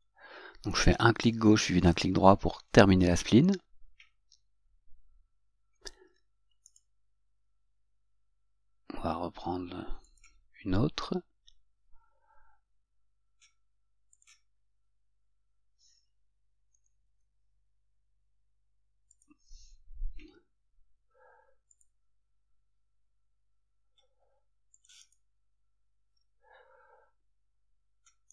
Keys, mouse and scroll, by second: 6.9 right click, 10.3 click, 14.3 click, 17.6 F8.